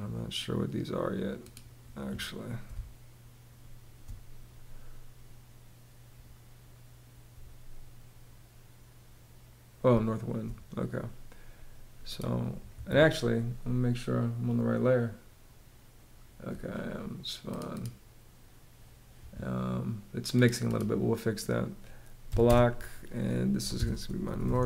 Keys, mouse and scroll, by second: 2.3 space, 9.5 space, 12.3 Escape, 21.9 b, 22.1 space, 23.1-24.6 typing.